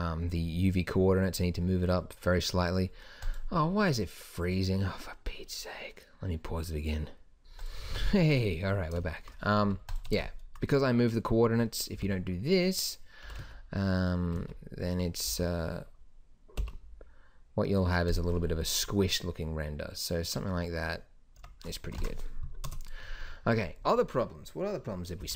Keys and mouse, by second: 8.6-15.9 drag, 12.2 o, 13.5 g, 21.7 Tab, 22.2 ctrl+s, 22.9 KP_0.